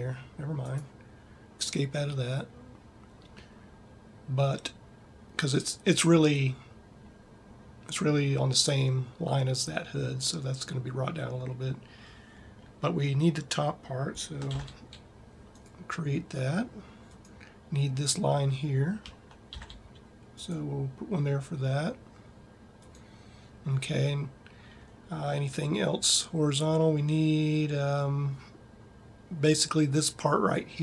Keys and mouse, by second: 14.9 ctrl+r, 19.4 ctrl+r, 23.1-25.2 drag.